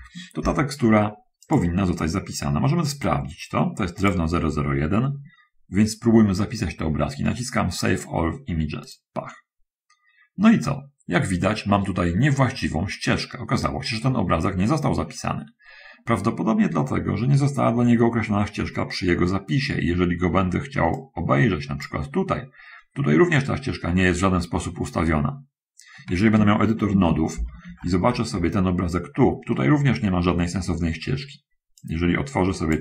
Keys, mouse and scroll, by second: 1.7 click, 4.3 click, 4.9 middle click, 4.9-5.4 scroll up 1, 5.7 middle click, 5.7 scroll up 1, 9.1 click, 21.2-22.3 drag, 27.2 shift+F3, 29.7 middle click, 31.9-32.8 drag.